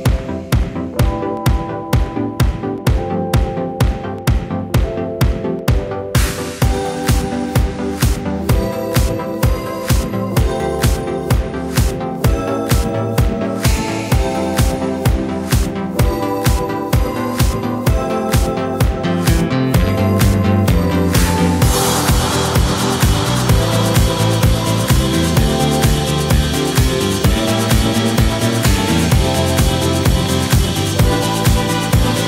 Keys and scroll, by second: 3.5-4.3 typing, 6.0-7.0 typing, 13.3 super+c, 13.3 super+v, 18.5 super+c, 18.7 super+v, 25.3 BackSpace, 25.4 Left.